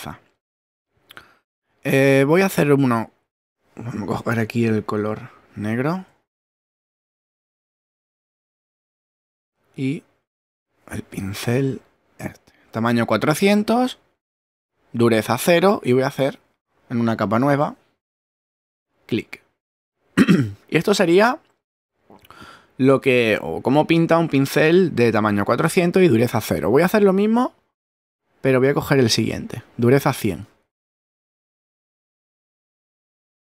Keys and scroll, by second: 6.2 shift+<.